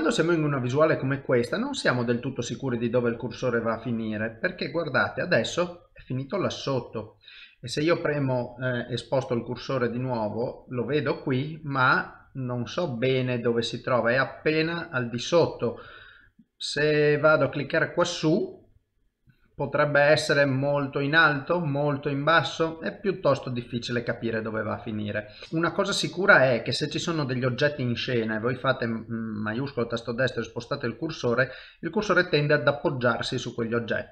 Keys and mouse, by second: 4.4 middle click, 9.6 shift+right click, 11.3 middle click, 17.7 shift+middle click, 19.1 shift+right click, 20.4 middle click, 25.4 middle click, 28.9 shift+right click, 29.8 middle click.